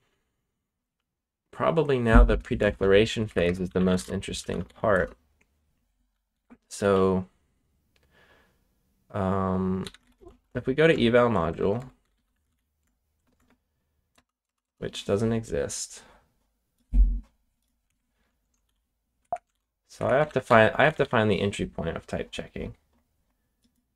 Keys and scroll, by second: 2.5-6.8 typing, 9.5-13.3 typing, 14.1 Return, 15.3 typing, 17.8 Escape, 18.6 g, 19.2 Escape, 19.4 shift+g, 19.9 Escape, 20.2 ctrl+u, 20.4 ctrl+u, 20.8 g, 20.9 g.